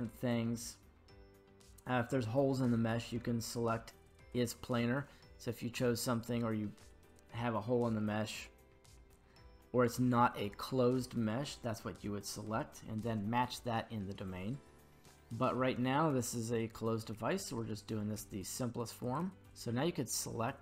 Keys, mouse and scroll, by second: 19.0 right click.